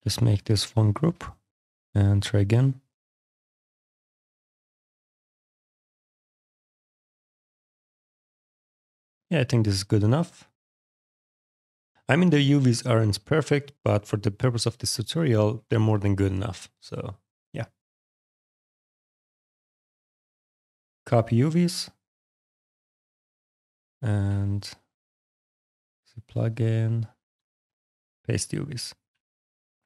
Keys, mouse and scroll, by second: 0.7 click, 1.5 click, 3.6 click, 4.3 click, 5.3 f, 5.8 alt+click, 6.2 alt+click, 7.0 alt+click, 8.9 click, 10.6 click, 11.7 click, 12.2 alt+click, 13.7 click, 17.8 click, 20.4 click, 21.8 click, 22.5 click, 24.2 ctrl+click, 27.5 click, 28.5 click, 28.9 shift+f, 29.3 alt+click.